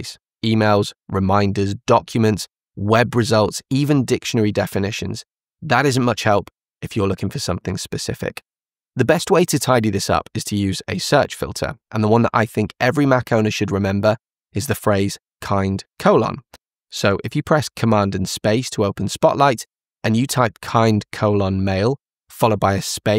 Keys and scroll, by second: 1.2 Down, 4.4 Down, 5.2 Down, 6.0 Down, 15.6 shift+;.